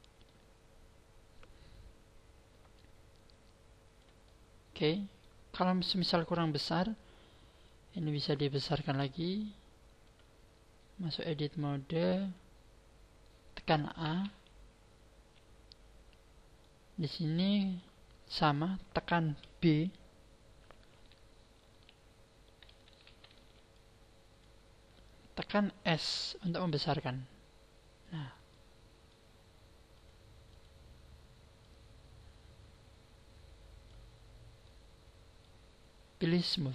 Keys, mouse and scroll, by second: 2.7 click, 4.2 middle click, 5.5-6.1 scroll up 6, 7.7 middle click, 8.9 click, 11.0 click, 14.0 a, 16.6 middle click, 18.4-19.8 scroll up 1, 19.8 scroll up 1, 21.0 n, 21.7 b, 23.1 n, 23.4 b, 24.8-25.2 scroll down 4, 26.4 s, 28.1 click, 28.4 middle click, 29.9 click, 31.6 click, 34.2-34.8 scroll down 6, 34.6 middle click, 36.4 click.